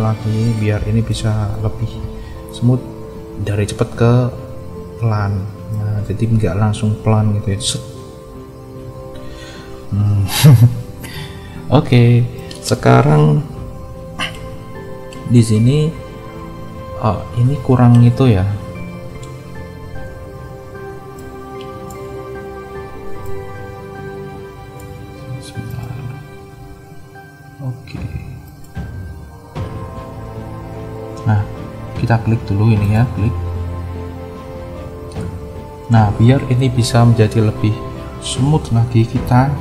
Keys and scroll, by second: 2.0 space, 5.2 space, 9.4 space, 13.7 =.